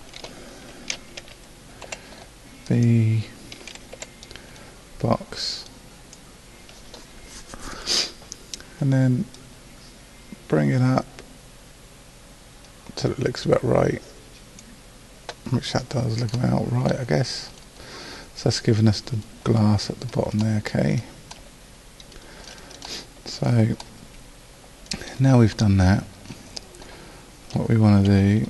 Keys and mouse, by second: 1.2 a, 1.8 b, 4.0 b, 28.1 a.